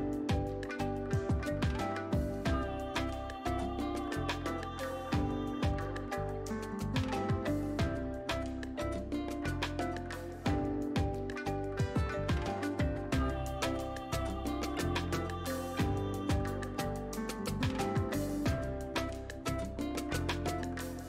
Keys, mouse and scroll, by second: 7.5-9.2 scroll up 1, 9.2 click, 11.3 shift+click, 12.7-16.7 drag, 20.6 scroll up 1.